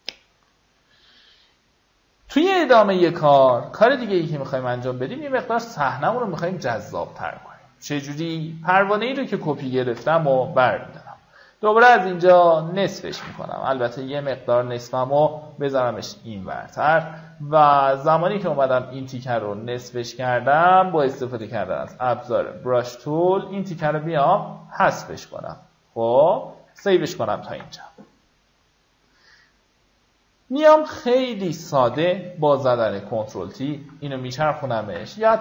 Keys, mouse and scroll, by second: 3.8 v, 4.4-4.8 alt+scroll up 1, 6.2 click, 10.4 m, 11.5-14.0 drag, 14.2-15.0 typing, 17.4 click, 18.0 right click, 20.2 click, 21.4 b, 22.4 click, 24.1 ctrl+d, 25.4 click, 27.9 v, 29.3-30.3 alt+scroll down 1, 30.3 click, 33.0 shift+click.